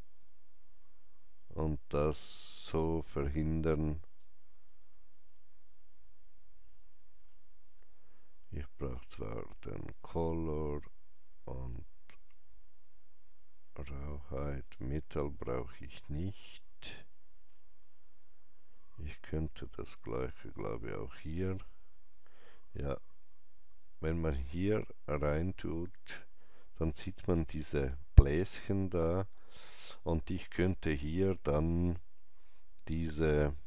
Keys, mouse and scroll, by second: 5.8 scroll down 1, 6.5 scroll up 1, 8.8 click, 9.9 click, 14.5 click, 17.2-17.8 scroll down 1, 17.8 scroll down 1, 20.0-23.9 drag, 20.3-23.2 scroll down 1, 24.4-30.1 drag, 24.4 scroll down 1, 24.5 alt+right click, 30.2 alt+right click, 30.2 click, 30.2 scroll up 1, 31.9-33.5 scroll up 1, 33.5 click.